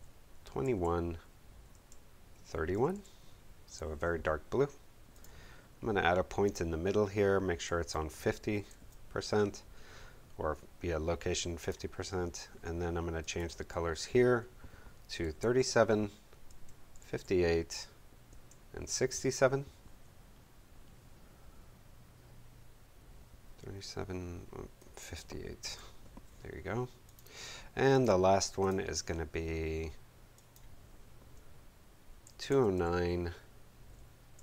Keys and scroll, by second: 0.0-0.7 typing, 1.7 Tab, 2.6-3.4 typing, 8.3-9.2 typing, 15.2 3, 16.4-17.5 typing, 18.2 Tab, 18.8 6, 20.1 7, 25.6 5, 32.2 2, 32.7 9, 34.3 Tab.